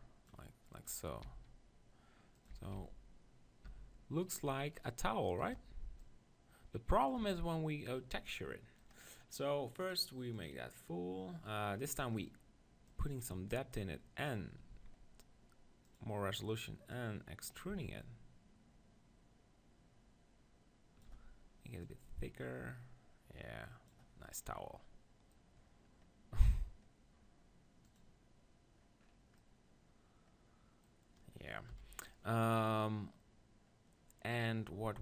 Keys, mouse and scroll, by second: 1.2 e, 2.4-4.5 drag, 2.4 right click, 2.6 Tab, 2.7 z, 3.6 Tab, 4.2-7.2 right drag, 4.5 shift+i, 6.0-7.6 drag, 8.2-10.4 middle drag, 10.4-11.7 drag, 11.8-13.0 middle drag, 13.0-14.7 drag, 14.7 z, 15.9-18.8 drag, 22.1-24.1 drag, 24.2-25.6 middle drag, 27.9-29.7 drag, 31.7 KP_1.